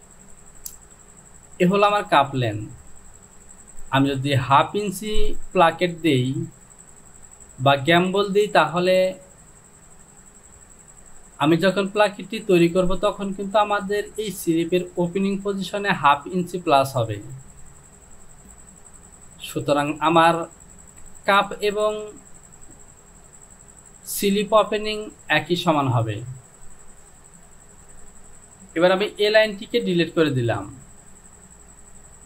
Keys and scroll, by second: 27.8 ctrl+z, 28.8 Delete.